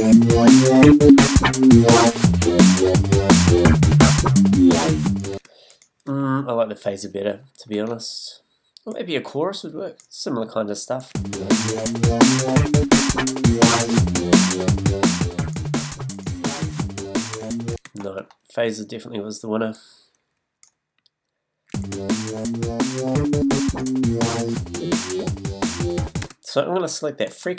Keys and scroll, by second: 5.3 space, 6.0 BackSpace, 11.1 space, 17.3 BackSpace, 18.8 space, 21.7 space, 26.2 space.